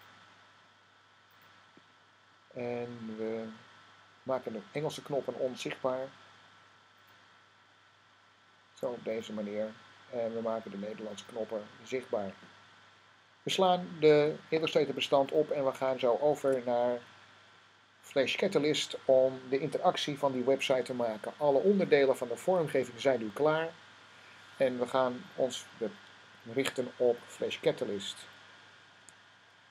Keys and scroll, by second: 16.2 s.